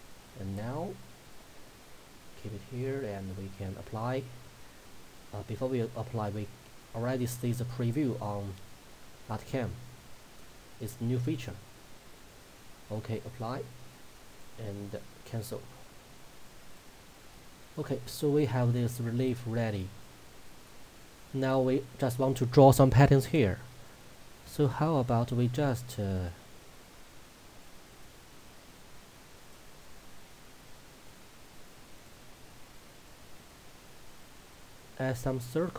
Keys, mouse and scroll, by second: 0.8-2.2 scroll down 1, 4.6-12.4 middle drag, 12.4 click, 16.8 click, 17.4-24.5 middle drag, 24.5 click, 27.6-30.7 drag, 30.7 right click, 32.0-35.7 drag.